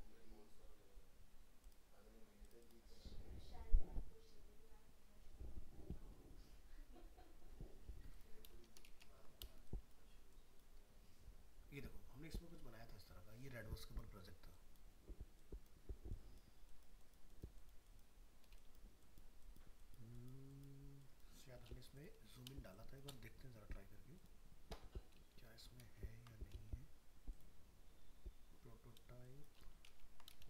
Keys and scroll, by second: 25.8 ctrl++, 29.9 ctrl+-.